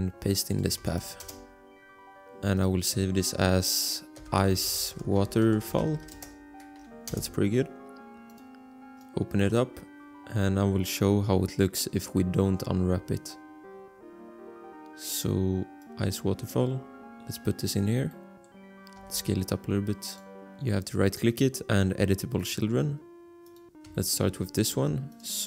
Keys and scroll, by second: 1.0 ctrl+v, 1.2 Return, 4.4-6.3 typing, 9.2 Return, 19.2 s.